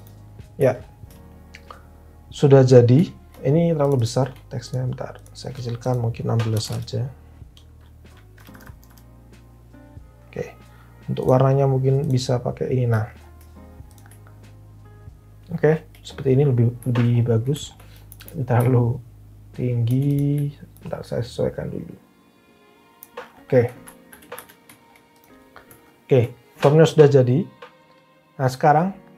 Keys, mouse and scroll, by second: 6.3-7.1 typing, 8.3 Down, 8.5 Down, 8.6 Down, 8.8 Down, 24.0 alt+v, 24.3 alt+h.